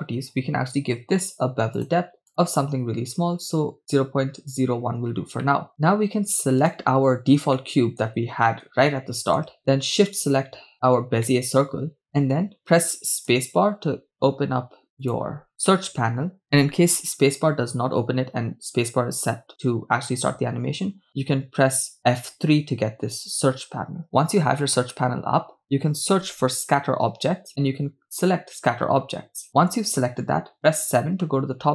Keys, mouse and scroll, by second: 0.3 scroll down 2, 1.8-3.8 drag, 4.4 click, 5.7 middle click, 5.7-6.3 scroll down 2, 6.7-7.4 right drag, 8.0 shift+middle click, 8.2-8.8 scroll up 2, 9.4 shift+middle click, 10.5 shift+right click, 12.0-13.4 middle drag, 13.8 space, 26.6 t, 30.6 KP_7, 31.6-31.7 scroll down 2.